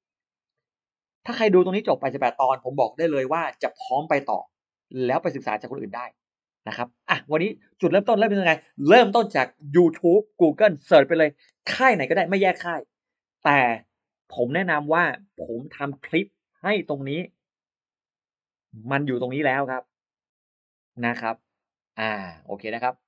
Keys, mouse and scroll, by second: 3.6 click, 5.6 middle click.